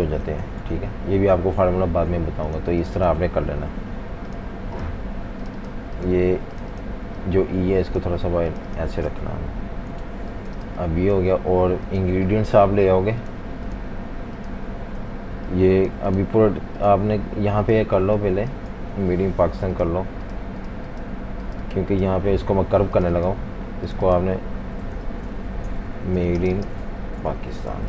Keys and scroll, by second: 0.0-1.1 typing, 9.2 super+-, 9.4 super+-, 9.6 super+-, 10.6 space, 11.1 space, 18.0-19.3 typing, 22.2 Delete, 24.8 super+a, 25.3-27.8 typing.